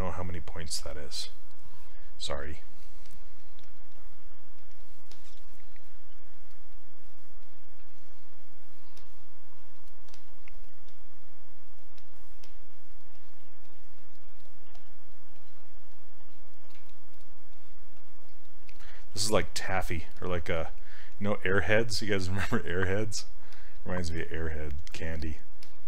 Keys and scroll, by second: 10.1 s, 14.8 s, 19.2 s.